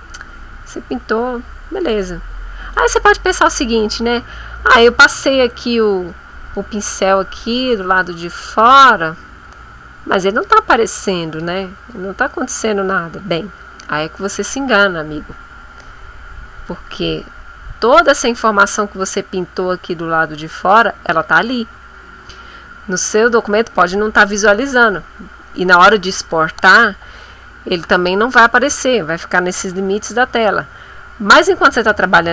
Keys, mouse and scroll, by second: 0.0-2.7 drag, 6.5 click, 7.7-10.6 drag, 11.0 click, 11.9-13.9 drag, 14.1-18.3 drag, 21.9 ctrl+click, 22.7-23.7 drag, 24.1 click, 31.1-32.3 drag.